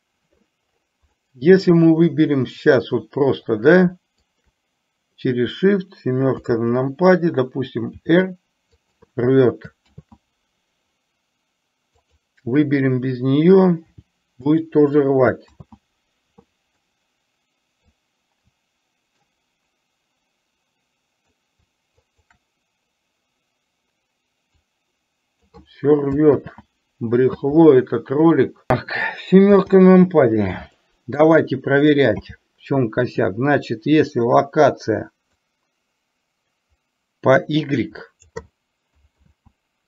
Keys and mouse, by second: 1.3-1.8 middle drag, 4.4 shift+click, 8.0 r, 9.9 ctrl+z, 12.2 click, 14.0 r, 15.7 ctrl+z, 16.9-17.9 middle drag, 19.3-21.4 middle drag, 22.2 shift+click, 24.8 click, 26.5 ctrl+z, 30.9 middle drag, 32.3 n, 35.4-38.4 drag, 39.3 ctrl+z.